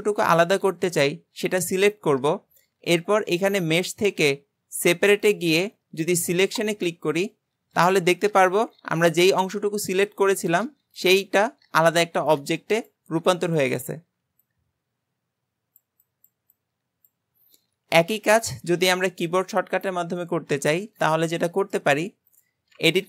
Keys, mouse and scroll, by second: 3.5-6.7 drag, 8.3 click, 11.0 click, 11.2 g, 12.8 click, 13.0 g, 20.9-21.9 middle drag, 21.9-22.3 scroll up 2, 22.3 click.